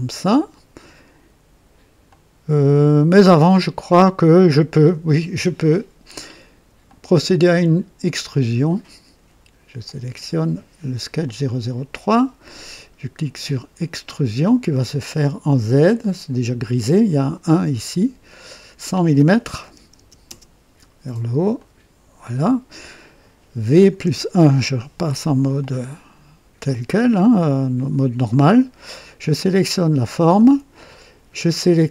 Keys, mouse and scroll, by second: 2.0-5.0 drag, 6.8 click, 8.2 click, 9.7 click, 11.1 click, 13.7 click, 19.5 KP_1, 19.9 KP_0, 20.2 KP_0, 21.5 click, 23.8 v, 23.9 KP_1, 25.5-26.8 drag, 26.9 click, 27.7 typing, 28.2 right click, 29.3 click.